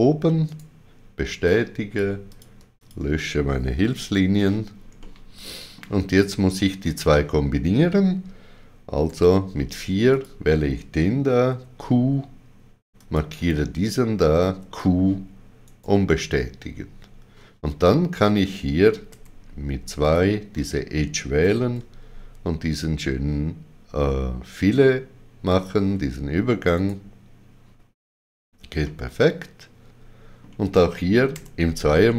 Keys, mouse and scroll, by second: 0.4 click, 0.4 right click, 2.2 click, 2.7 shift+click, 5.0 middle click, 9.1 4, 10.1 click, 11.5 q, 13.0 click, 14.5 q, 15.6 right click, 20.0 click, 20.0 right click, 21.4 d, 25.4 shift+click, 26.7 right click, 28.8 middle click, 31.3 2, 32.0 shift+middle click.